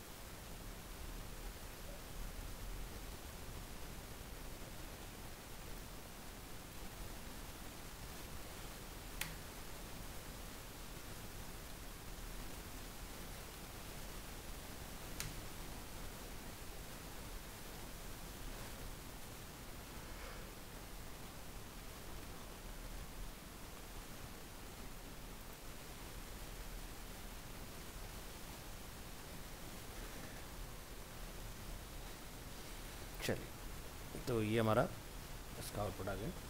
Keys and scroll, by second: 0.7 ctrl+s, 1.2 alt+Tab, 30.3 ctrl+s, 30.7 alt+Tab.